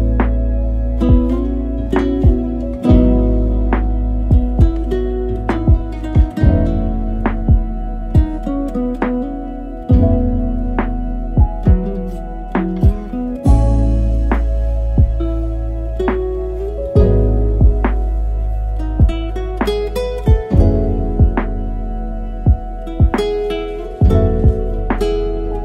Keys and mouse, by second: 1.4-3.1 drag, 3.6 middle click, 4.1 a, 4.2 a, 4.8-5.8 middle drag, 7.0 click, 7.5 click, 7.9 click, 10.1 n, 11.7 drag, 12.6-14.7 drag, 14.9 z, 24.5 click, 24.9 click, 25.2 click.